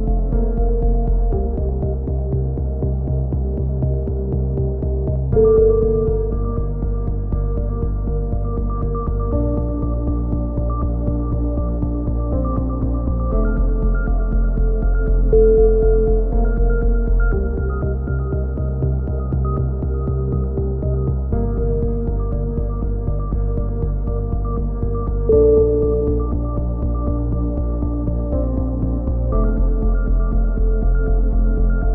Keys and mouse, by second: 0.3-1.9 drag, 3.0-4.0 drag, 12.5 a, 12.9 c, 14.3 click, 15.2-17.5 middle drag, 16.5 c, 17.5-19.0 drag, 18.0 right click, 23.2 a, 24.5 c, 25.4-26.7 drag, 30.9 a.